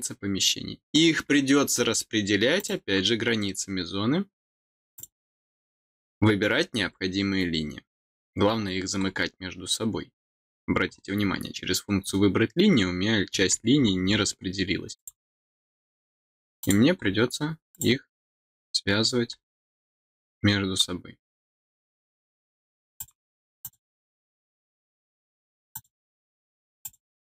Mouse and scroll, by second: 2.5 click, 4.8 click, 5.5 scroll up 2, 6.7 scroll up 2, 8.1-8.4 scroll down 4, 8.9 scroll up 2, 10.2 scroll up 2, 10.8-12.0 scroll up 2, 12.0-13.5 scroll up 1, 13.5-14.0 scroll down 2, 14.9 click, 16.5 click, 16.9 middle click, 17.6 click, 22.9 click, 23.5 click, 25.6 click, 26.7 click.